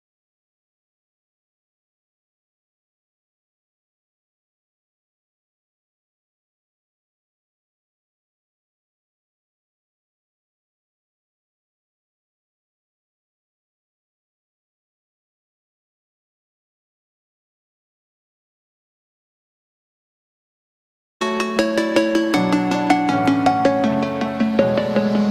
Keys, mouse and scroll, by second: 0.3 click, 1.1-1.6 scroll up 1, 1.8 click, 2.1 scroll down 1, 2.8-3.3 scroll up 1, 3.4-10.1 drag, 10.1 space, 10.2 scroll down 1, 11.1 space, 12.3 click, 13.2 space, 13.9 scroll up 1, 14.2 click, 16.2 scroll up 1, 16.5 shift+middle click, 17.0 scroll down 1, 17.4-21.2 middle drag.